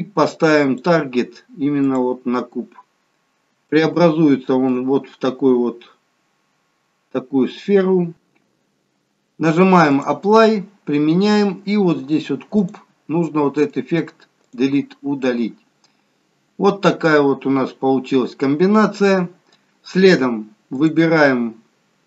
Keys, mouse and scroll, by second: 0.6 click, 3.8 shift+middle click, 5.8 scroll up 2, 6.3 scroll down 1, 9.9 click, 12.6 click, 13.5 right click, 15.8-16.3 scroll down 1, 16.3 scroll up 1, 20.8 click.